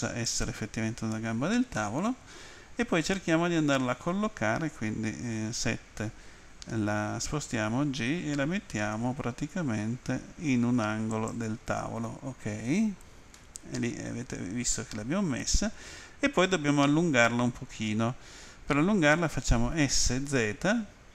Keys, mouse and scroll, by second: 0.2 ctrl+click, 1.7 middle click, 5.4 Home, 11.1 ctrl+click, 13.4 middle click, 20.0-20.7 typing.